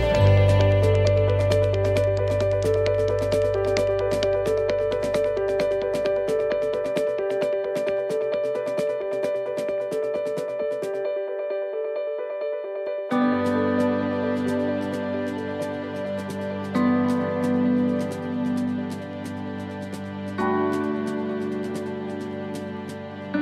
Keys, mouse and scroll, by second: 0.1 shift+middle click, 1.4 shift+middle click, 1.9 middle click, 3.4 shift+middle click, 3.9-4.4 scroll down 2, 4.3 middle click, 4.7-5.3 scroll up 2, 5.1 middle click, 5.8 right click, 6.7 middle click, 7.4 shift+middle click, 8.1 middle click, 8.6 shift+middle click, 9.1 scroll down 3, 9.5 shift+middle click, 10.2 middle click, 10.6 scroll up 1, 11.1 scroll up 2, 11.2 right click, 12.1 shift+right click, 12.6 right click, 15.7 click, 17.3 right click, 18.3 l, 22.3 x.